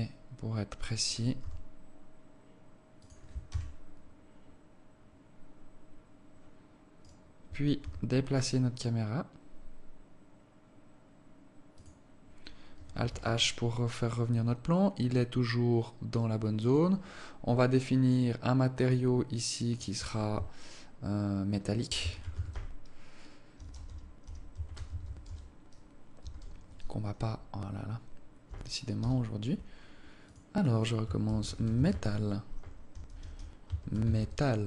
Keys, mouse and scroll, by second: 0.0 scroll down 1, 0.4 scroll up 1, 1.8 g, 3.9 KP_0, 7.5 right click, 8.2 g, 13.5 alt+h, 17.0 right click, 18.4 click, 19.2 click, 20.1 click, 30.6 click.